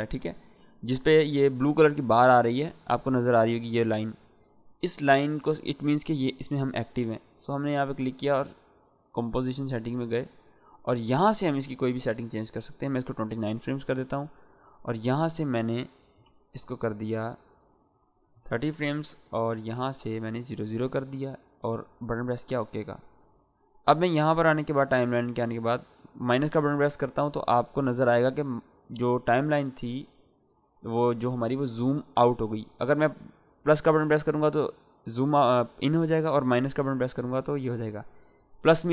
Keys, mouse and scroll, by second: 7.5 click, 11.9 click, 15.9 Right, 16.3 BackSpace, 17.7 Left, 19.5 BackSpace, 21.9 click, 25.5-28.9 -, 33.3 =, 36.7 -, 36.9 -.